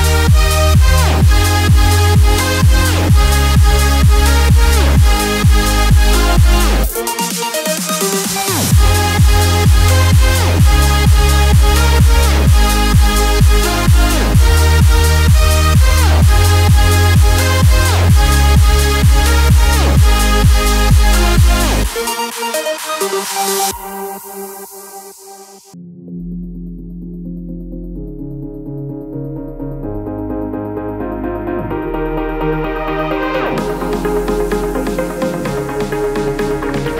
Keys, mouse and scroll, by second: 1.3 click, 3.6 click, 3.6 typing, 6.2 ctrl+z, 6.2-6.5 typing, 7.8 click, 10.3-11.2 typing, 14.2 click, 14.2 typing, 15.1-16.0 alt+scroll up 1, 16.3 click, 18.1-18.7 scroll down 1, 18.7-33.8 drag, 34.2-34.7 alt+scroll down 1, 35.4-35.8 alt+scroll up 1, 36.3 click, 36.7 space.